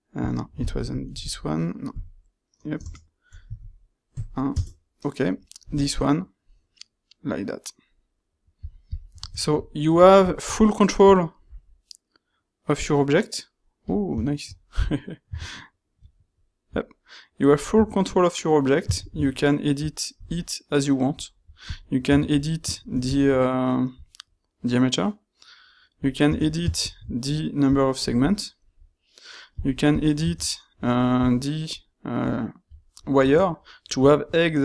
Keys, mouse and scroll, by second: 19.1 ctrl+shift+q, 26.8 ctrl+shift+q.